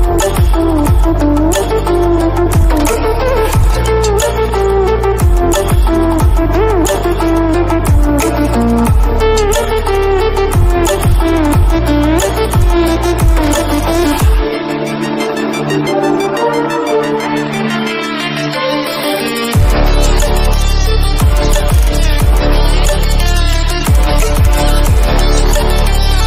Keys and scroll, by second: 11.7 ctrl+-, 12.7 ctrl+=, 17.5 ctrl+-.